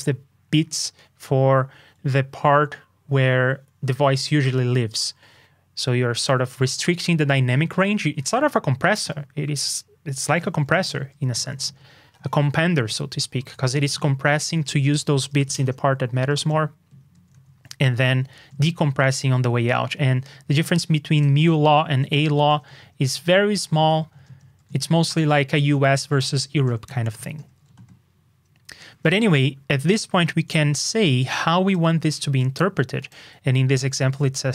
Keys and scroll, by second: 29.0 super+Tab.